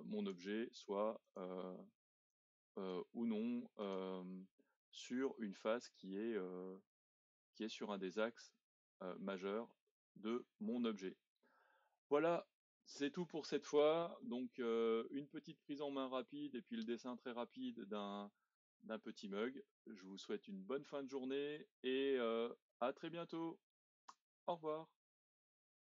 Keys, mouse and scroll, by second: 0.4 e, 2.3 click, 3.1 e, 4.3-7.3 middle drag, 9.2-9.7 scroll down 2, 9.7 middle click, 10.6-13.6 scroll up 1, 14.6-18.9 middle drag, 18.9-20.1 scroll up 1, 20.1-24.2 shift+middle drag.